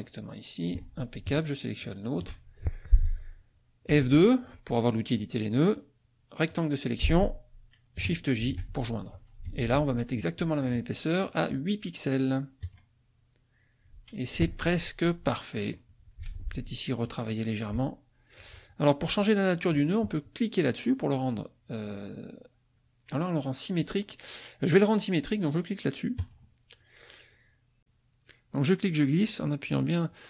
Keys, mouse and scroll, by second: 1.8 shift+click, 3.9 F2, 5.7 click, 8.4 shift+j, 9.5 F1, 11.2 click, 12.6 click, 14.4 F2, 15.5 click, 16.3 ctrl+z, 16.7 ctrl+click, 26.2 click, 27.8-30.2 ctrl+drag.